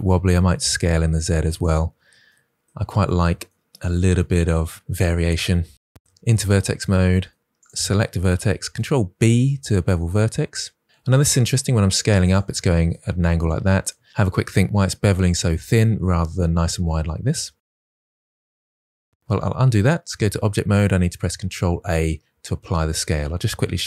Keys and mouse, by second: 0.1 z, 1.6 click, 2.2 middle click, 3.0 shift+middle click, 6.5 1, 8.6 ctrl+shift+b, 19.3 ctrl+z, 20.1 Tab, 21.3 ctrl+a.